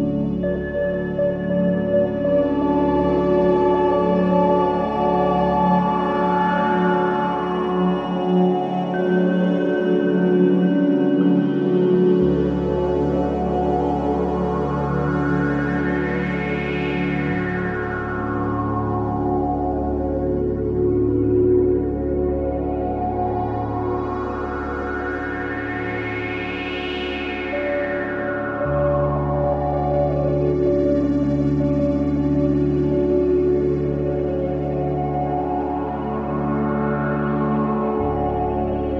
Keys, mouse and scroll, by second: 1.0 -, 1.1 ctrl+z, 1.9 ctrl+z, 3.2 click, 3.8-4.3 scroll up 1, 4.5 ctrl+z, 5.4 click, 6.3 ctrl+z, 7.2 ctrl+z, 8.3 click, 13.9 alt+middle click, 14.8 ctrl+z, 15.6 click, 18.3 alt+middle click, 19.6 click, 20.2 alt+middle click, 21.2 click, 21.7 scroll down 1, 22.1 alt+middle click, 22.5-24.5 scroll up 1, 24.7 click, 26.4 alt+middle click, 27.4 click, 27.4 click, 28.3-30.3 alt+middle drag, 30.3 click, 30.6 alt+middle click, 32.0 click, 32.0 click, 32.3 alt+middle click, 33.5 click, 34.0 alt+middle click, 35.1 click, 35.5 alt+middle click, 36.9 F7, 38.4 click, 38.8 alt+middle click.